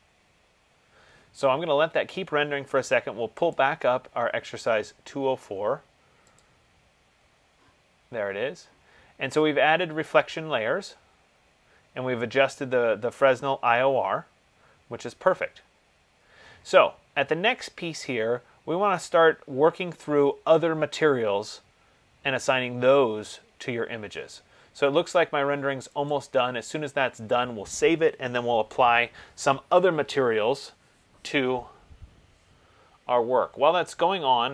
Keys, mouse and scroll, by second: 3.7 click, 6.6 click, 8.4 middle click, 16.4 middle click, 26.2 click.